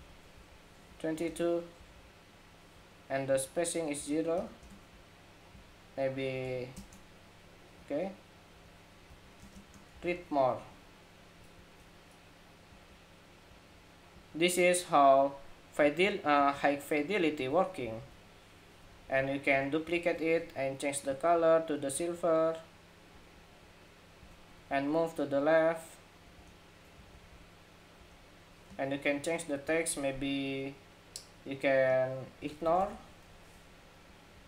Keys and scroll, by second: 10.3 ⟲, 19.6 super+d, 33.2 ↺, 33.2 ⟲.